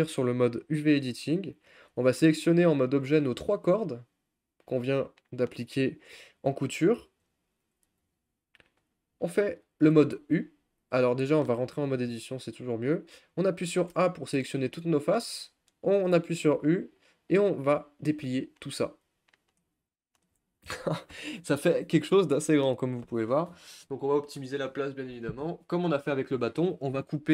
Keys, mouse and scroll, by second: 0.0 click, 2.6 Tab, 3.2 click, 3.4-4.7 scroll down 2, 4.7 shift+click, 5.2-6.8 shift+middle drag, 6.8 shift+click, 12.2 Tab, 13.9 a, 14.4-18.2 middle drag, 18.2 u.